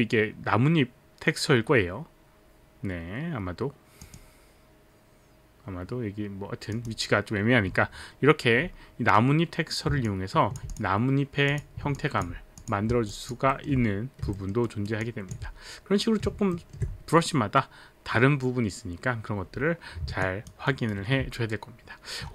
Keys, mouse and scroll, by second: 4.0 click, 6.8 click, 10.1 alt+click, 10.8 click, 11.5 click, 13.1 alt+click, 13.5 alt+middle click, 14.3 alt+middle click, 14.6 alt+right click, 15.0 alt+click, 15.0 alt+right click, 15.0 alt+middle click, 16.5 alt+middle click, 20.2 alt+click, 20.6 alt+right click.